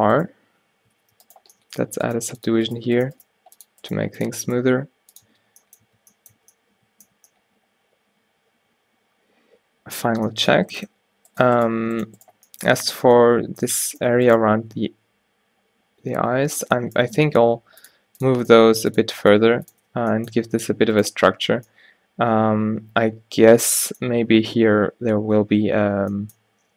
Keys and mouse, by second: 1.1 alt+w, 2.3-4.7 typing, 5.4 Tab, 5.9 a, 6.4 a, 10.2 Tab, 11.8 g, 12.8 a, 13.0 a, 16.2 alt+w, 17.3-20.0 typing, 21.6 a, 26.2-26.7 middle drag.